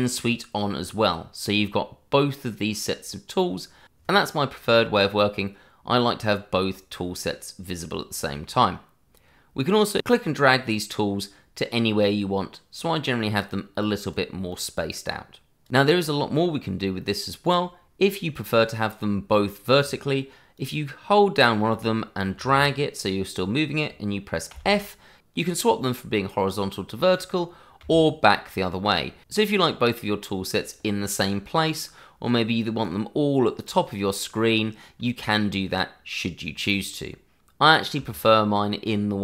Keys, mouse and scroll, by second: 10.1 click, 20.5 click, 34.9 click, 36.9 click.